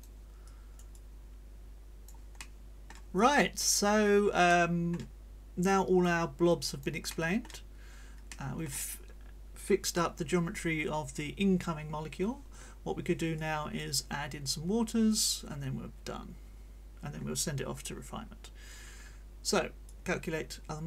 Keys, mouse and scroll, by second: 0.5-3.1 drag, 0.9-2.3 right drag, 3.1 click, 4.5 middle click, 5.7 click, 6.5 click, 7.1 middle click, 8.3 middle click, 13.3 click, 19.9-20.8 drag.